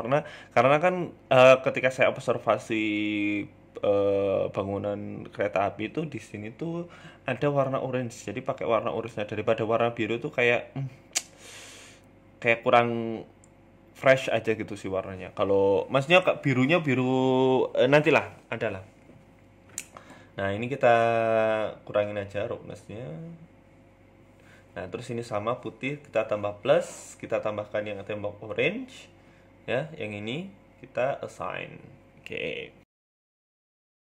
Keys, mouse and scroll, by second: 1.3 click, 4.6 click, 5.0 click, 8.8 click, 11.9 middle click, 12.9 click, 13.2 shift+middle click, 13.6 middle click, 15.6 click, 16.3 click, 16.9 scroll down 3, 17.4 click, 18.1-18.9 scroll down 2, 19.0 click, 21.8 shift+middle click, 22.0 Tab, 22.2 middle click, 22.5 scroll up 1, 22.6 shift+middle click, 23.1 right click, 23.9 click, 26.0 click, 26.5 click, 28.7 Tab, 29.3 middle click, 29.7 click, 30.9 click, 31.4 middle click, 31.7 Tab, 31.9 middle click, 32.5 shift+middle click, 33.2 right click, 34.0 click.